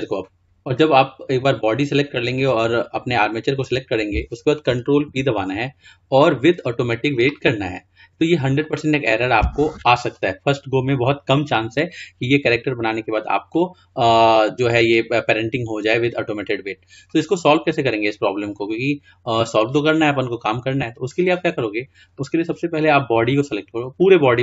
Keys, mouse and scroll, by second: 5.2 ctrl+p, 17.5-18.2 scroll down 2, 18.2-19.0 scroll up 3, 19.0-21.9 scroll down 2, 22.2 click.